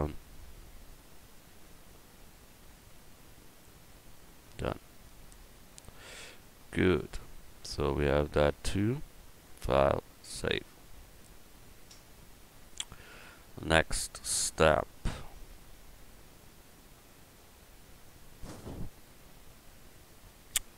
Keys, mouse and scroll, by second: 4.3 Tab, 9.4-11.0 right drag.